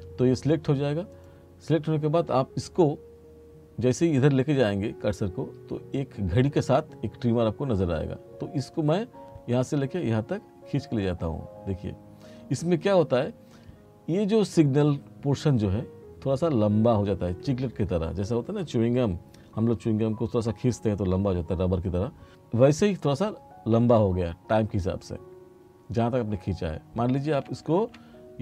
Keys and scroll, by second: 27.8 ctrl+z.